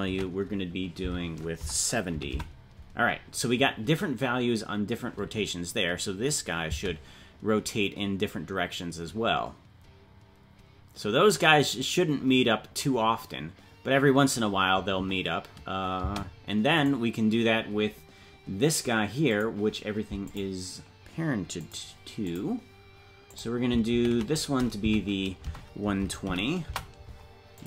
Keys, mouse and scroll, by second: 16.8 right click, 16.8 space, 19.2-27.6 drag.